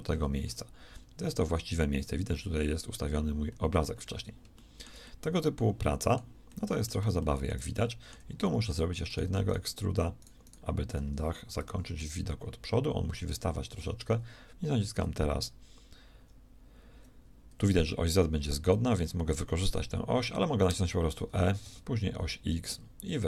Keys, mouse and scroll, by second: 11.5 KP_1, 20.6 e.